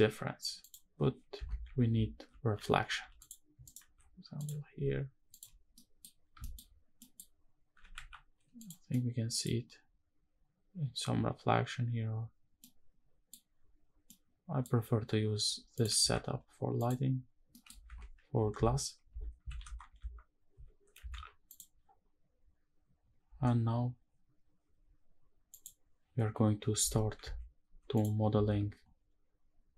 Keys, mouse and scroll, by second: 0.3 click, 1.1 shift+`, 3.4 shift+right click, 3.6 shift+a, 4.6 s, 5.0 click, 5.5 middle click, 6.2 shift+middle click, 6.4 scroll up 1, 6.8 middle click, 7.0-7.4 scroll up 2, 7.5 g, 7.7 x, 8.3 click, 8.6 middle click, 12.3-13.0 middle drag, 13.8 middle click, 15.5 click, 15.7 x, 17.1-17.8 scroll down 2, 17.2 middle click, 23.0 ctrl+s, 25.2 click, 26.6 shift+`, 28.1 ctrl+s.